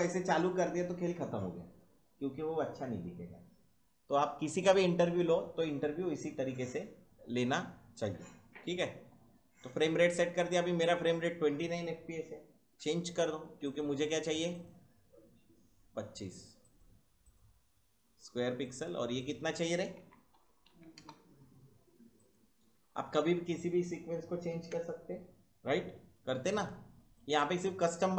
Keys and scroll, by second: 19.7-21.4 typing.